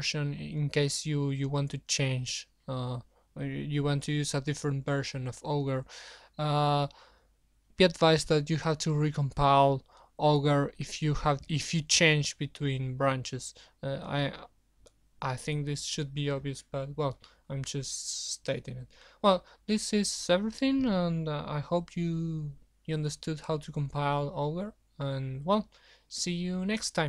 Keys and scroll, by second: 0.1 super+1.